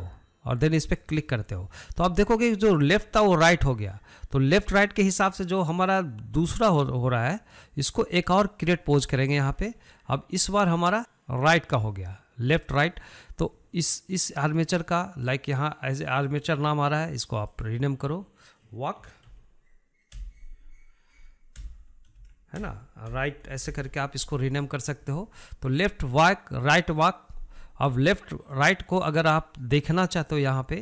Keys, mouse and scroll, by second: 1.5 click, 8.9-17.0 drag, 18.1-21.3 drag, 26.7 click, 27.4 click, 28.5 click, 29.1 click, 29.5 click.